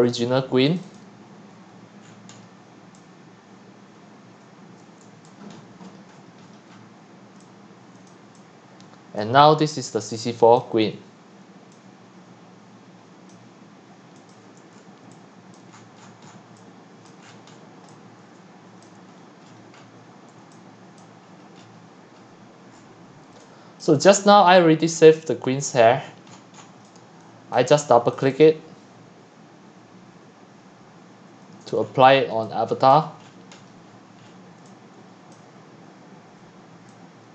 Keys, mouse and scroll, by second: 0.7-1.5 drag, 2.0-2.9 scroll down 9, 2.9-4.3 scroll down 4, 4.3-5.2 scroll down 1, 5.2 click, 5.7-7.2 scroll, 8.1 click, 8.5-10.0 scroll, 10.0 scroll, 10.6 click, 14.7-15.1 scroll down 1, 15.1 x, 15.7 drag, 15.8-16.6 scroll up 18, 16.6 c, 17.1 click, 17.2-17.8 scroll up 12, 17.8-19.3 typing, 18.8-19.2 drag, 19.2-20.4 scroll down 25, 20.4-20.9 typing, 21.0 click, 21.4-22.3 scroll down 21, 22.7 click, 22.8 scroll down 1, 23.3 x, 23.8-26.0 drag, 26.0-26.8 scroll down 17, 26.8 x, 27.3 c, 27.5-28.2 drag, 31.8-32.3 scroll down 8, 32.9 x, 32.9 x, 33.1 click, 33.4-34.6 scroll down 34, 34.6 x, 35.0 c, 35.3 click.